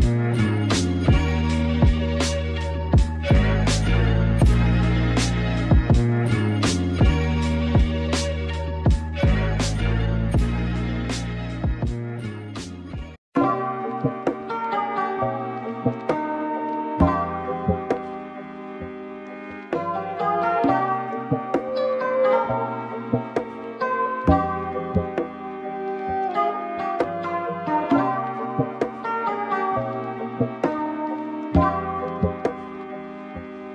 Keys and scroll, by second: 3.5 super+z, 10.6 super+z, 14.2 super+z, 18.9 super+-, 19.1 super+[, 19.2 super+[, 19.4 super+[, 19.7 super+].